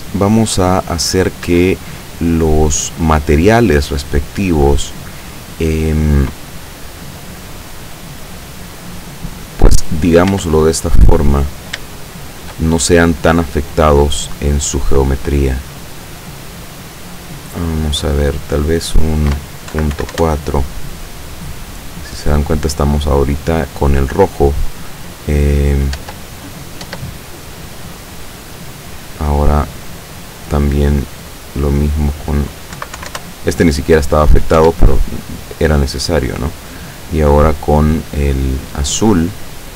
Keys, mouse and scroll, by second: 1.5 Escape, 2.7 right click, 8.3-9.2 middle drag, 10.0 right click, 10.4 Tab, 10.9 right click, 12.0-12.6 shift+middle drag, 12.8-14.0 shift+scroll down 7, 13.4 middle click, 15.2 click, 19.8 KP_Decimal, 20.0 KP_4, 20.2 KP_Enter, 22.1-22.7 scroll up 3, 26.1 Tab, 26.5 right click, 26.9 Tab, 29.0-29.9 scroll down 3, 31.3 click, 31.7 click, 32.8 KP_Decimal, 33.1 KP_4, 33.2 KP_Enter, 34.7 Tab, 36.3 right click, 37.5-37.9 scroll up 2, 38.2-39.0 scroll down 2.